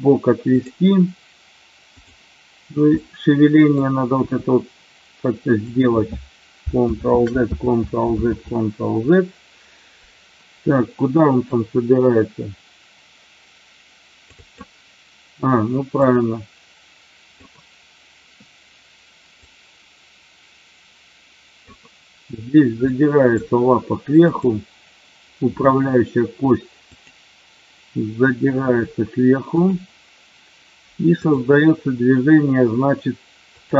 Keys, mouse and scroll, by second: 0.6 click, 2.8 middle click, 4.1 g, 5.7 click, 6.9 ctrl+z, 7.6 ctrl+z, 8.3 ctrl+z, 11.4-14.6 drag, 16.1-17.4 drag, 19.5-21.7 drag, 23.0 middle click, 26.9-27.5 drag, 28.6 r, 29.5 click, 33.5 click.